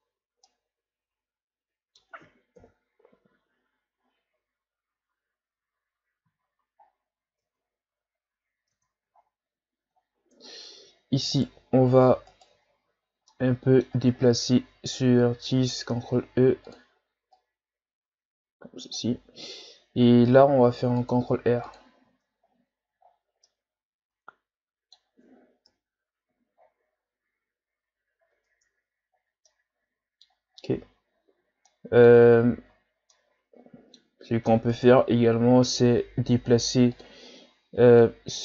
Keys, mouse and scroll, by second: 0.4-2.6 middle drag, 2.6 KP_1, 3.6-5.3 scroll down 9, 6.4-7.4 shift+scroll up 10, 7.4 Tab, 8.7 Tab, 9.2-10.0 scroll down 2, 10.0-10.3 shift+scroll down 2, 10.3 Tab, 11.3 alt+right click, 12.3 alt+right click, 13.0 scroll down 3, 13.3 middle click, 14.2-14.6 scroll up 3, 15.9 ctrl+e, 20.5 ctrl+r, 22.0 Tab, 22.5-23.5 scroll down 7, 23.5-25.7 middle drag, 25.7 KP_1, 26.6-26.9 shift+scroll down 6, 26.9-27.9 scroll up 2, 28.3 Tab, 29.2 scroll down 2, 29.5-30.5 middle drag, 30.5-30.9 ctrl+scroll down 5, 30.9-31.7 scroll up 1, 31.7 middle click, 32.4-33.1 shift+scroll down 1, 33.1-34.2 middle drag, 34.2-34.7 scroll up 2, 34.7 right click, 36.9 click, 38.0-38.4 drag.